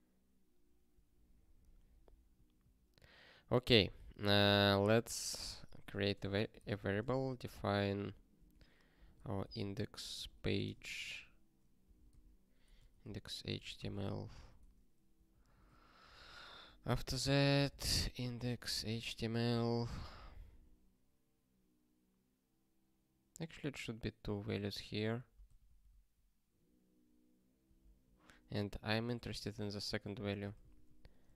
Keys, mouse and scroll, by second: 2.3 ctrl+n, 2.6 ctrl+n, 4.3 ctrl+p, 4.5 ctrl+a, 4.8 Return, 5.2-10.8 typing, 11.9 alt+b, 12.1 alt+d, 12.8-14.4 typing, 14.6 ctrl+alt+x, 15.3 ctrl+n, 15.5 ctrl+n, 16.0 Return, 16.1 ctrl+p, 16.2 Return, 16.7-19.4 typing, 19.6 ctrl+e, 25.4 ctrl+p, 25.6 ctrl+p, 28.6 Return, 29.4-31.3 typing.